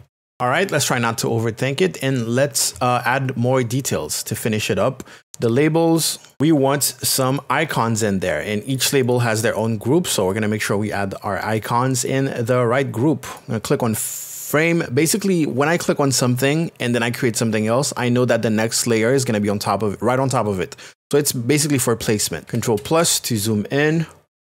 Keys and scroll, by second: 6.3 Return.